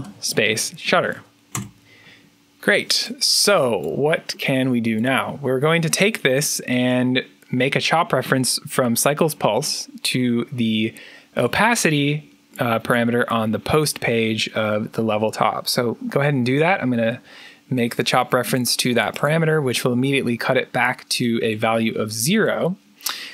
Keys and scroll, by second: 0.0-1.6 typing.